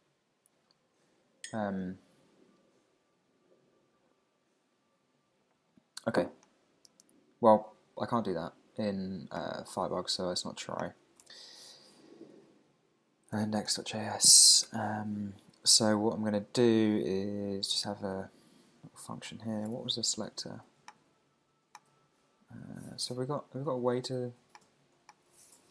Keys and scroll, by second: 11.3 super+Tab, 12.2 super+t, 14.6 Return, 19.7 super+Tab, 25.4-25.7 typing.